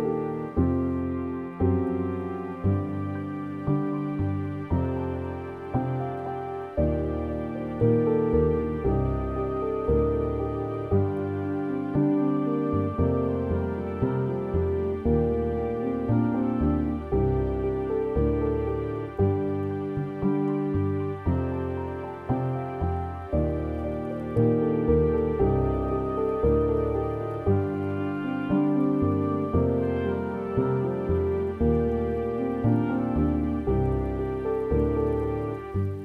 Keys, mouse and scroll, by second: 25.4-26.1 scroll down 2, 26.1 Tab, 31.7-32.0 scroll down 2, 32.0-32.5 scroll up 2, 33.9 r.